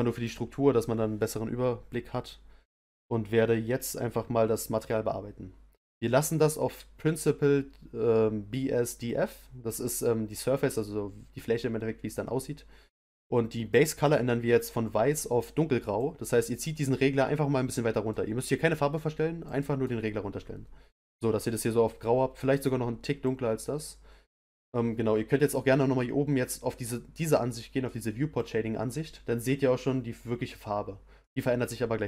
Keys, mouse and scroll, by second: 16.0 click, 23.2 click, 28.4 click, 31.2-32.0 middle drag.